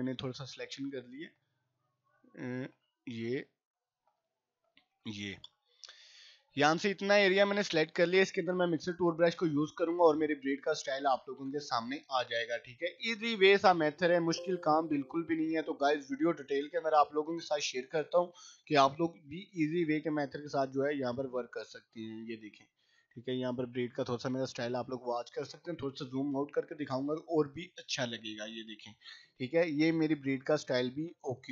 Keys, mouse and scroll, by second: 13.6 ], 13.9 ], 14.1 click, 25.9 right click, 26.1 click, 30.6 scroll down 1.